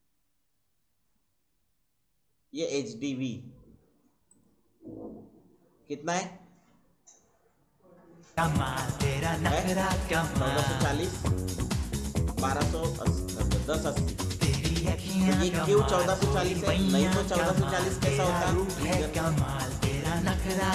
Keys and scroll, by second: 20.0-20.7 typing.